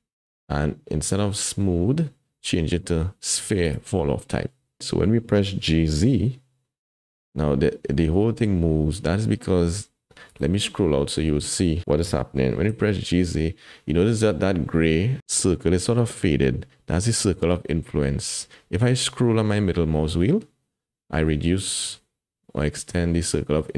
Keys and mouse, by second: 0.2-4.2 drag, 5.7 g, 12.3 g.